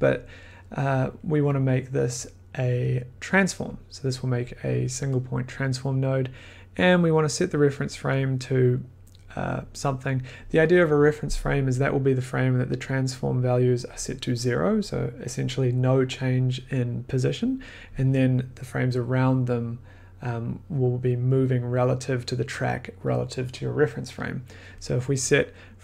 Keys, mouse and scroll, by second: 1.4 click, 2.1 click, 2.2 click, 2.7 click, 3.6 click.